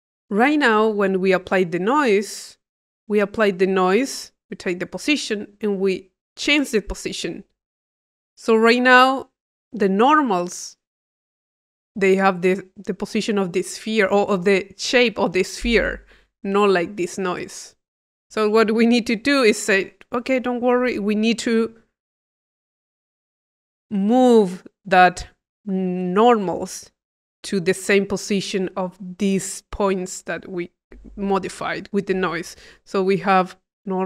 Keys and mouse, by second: 0.4-1.5 drag, 2.0 click, 2.8-3.8 drag, 17.7-19.4 drag, 19.5 click, 20.2 click, 21.0 click, 21.7 click.